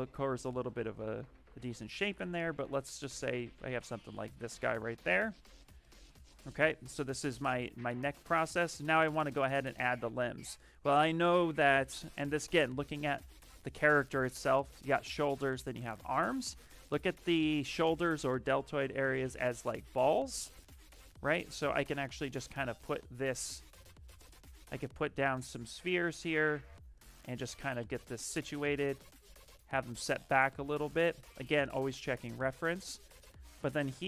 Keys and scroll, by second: 1.4 q, 3.5 w, 5.5 q, 8.9 s, 22.5 w, 28.5 q.